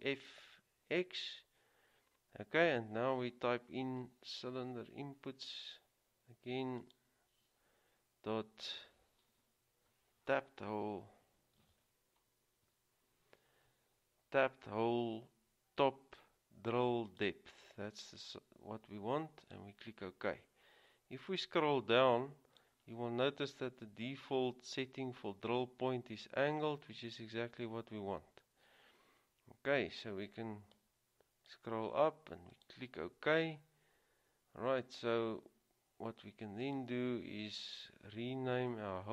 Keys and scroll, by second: 4.9 c, 11.7 typing, 12.8 typing.